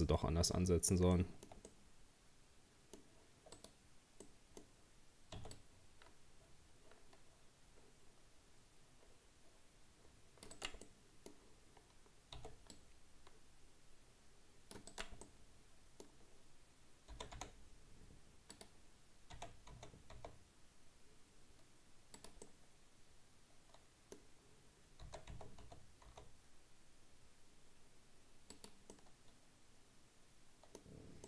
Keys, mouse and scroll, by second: 3.6 right click, 4.3-5.4 middle drag, 5.4 c, 10.9-12.4 middle drag, 12.4 c, 15.3-17.1 middle drag, 17.1 g, 19.4 r, 22.5-25.1 middle drag, 25.1 s, 28.9-31.2 middle drag.